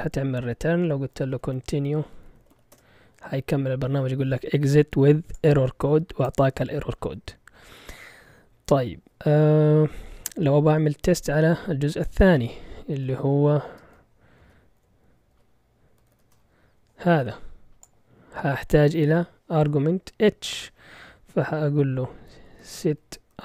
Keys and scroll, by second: 0.8-3.0 typing, 13.2 ctrl+l, 13.7-16.7 typing, 22.0-23.4 typing.